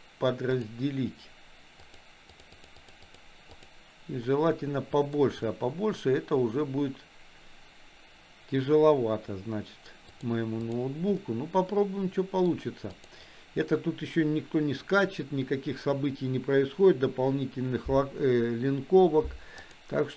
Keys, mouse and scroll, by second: 1.8 click, 2.4 click, 2.6 click, 3.1 click, 3.5 click, 4.7 middle click, 10.2 click, 11.2-12.5 middle drag, 13.0 click, 19.6 click.